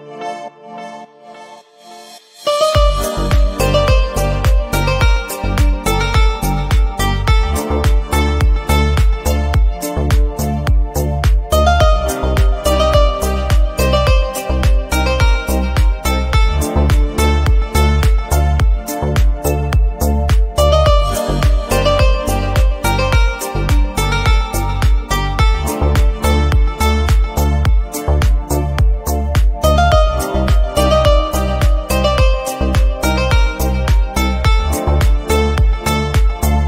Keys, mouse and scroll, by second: 0.0 s, 0.4 middle click, 1.4 g, 2.2 Tab, 2.3 middle click, 2.4 alt+z, 2.5 middle click, 3.1 KP_3, 3.3 alt+z, 3.6 Tab, 3.8 g, 4.9 scroll up 2, 5.0 alt+z, 5.1 alt+z, 5.4 click, 5.7 middle click, 6.1 s, 7.3 KP_3, 7.8 g, 8.5 alt+z, 8.6 middle click, 8.9 scroll up 1, 9.1 scroll down 1, 9.1 a, 9.5 g, 10.5 g, 11.0 alt+z, 11.1 middle click, 11.2 scroll down 2, 11.4 middle click, 11.5 alt+z, 11.6 middle click, 12.0-12.5 scroll down 1, 12.5 Tab, 12.8 KP_7, 13.1 alt+z, 13.2 shift+middle click, 13.4-13.9 scroll down 2, 13.4 shift+middle click, 13.9 alt+e, 14.7 middle click, 15.8 Tab, 16.0 ctrl+z, 16.1 ctrl+z, 16.4 a, 16.5 scroll down 2, 16.6 Tab, 16.9 click, 17.3 Tab, 17.4 a, 17.6 KP_7, 17.8-18.2 scroll up 1, 18.2 alt+e, 18.7 Tab, 18.8 alt+z, 18.9 middle drag, 19.1 scroll up 1, 19.2 Tab, 19.5 shift+n, 19.7 Tab, 19.8 middle click, 20.0 scroll down 2, 20.3-20.6 shift+middle drag, 20.6 click, 20.9 scroll down 1, 21.1 a, 21.3 shift+n, 21.6 Tab, 21.7 click, 21.8 scroll up 2, 21.9 shift+middle click, 22.1-22.8 shift+middle drag, 22.8-23.4 scroll up 3, 22.9 middle drag, 23.2 shift+middle click, 23.4 middle drag, 23.5 click, 23.7-24.3 middle drag, 24.3-24.6 scroll down 4, 24.6 scroll up 2, 24.8 shift+middle click, 25.0-25.3 middle drag, 25.3 click, 25.5 Tab, 25.8 alt+z, 26.4 3, 26.5 click, 26.8 alt+z, 27.2 g, 28.0 middle click, 28.9-29.2 scroll down 4, 29.2 KP_1, 29.3 scroll up 3, 29.6 r, 29.9 alt+z, 30.3 r, 30.6 scroll down 2, 30.7 alt+z, 30.8 middle click, 31.2 Tab, 31.3 click, 31.4 scroll down 1, 31.5-32.0 middle drag, 32.0-32.4 scroll down 3, 32.4 shift+middle click, 32.8-33.2 scroll up 3, 32.9 click, 33.0 shift+middle click, 33.2 Tab, 33.3 middle click, 34.8 Tab, 35.0 click, 35.2 Tab, 35.3 middle click, 36.1 middle click, 36.5 shift+d.